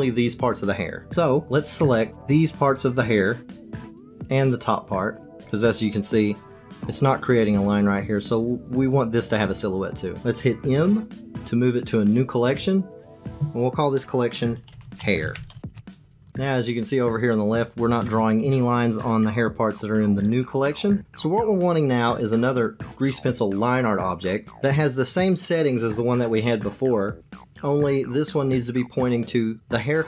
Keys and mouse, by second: 1.9 shift+click, 2.1 click, 2.7 shift+click, 3.5 shift+click, 3.7-5.4 shift+drag, 10.7 m.